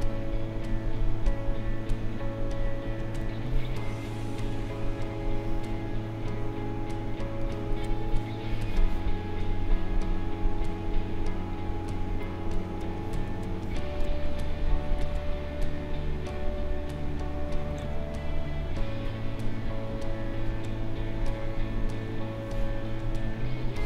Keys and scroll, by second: 3.2 space, 12.7 space.